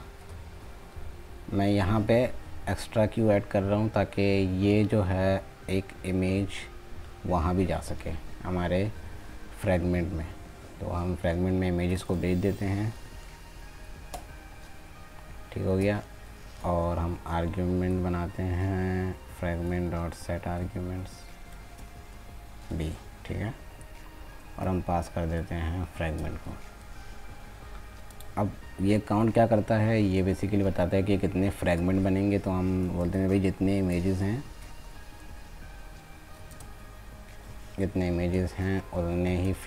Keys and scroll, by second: 36.5 ctrl+space.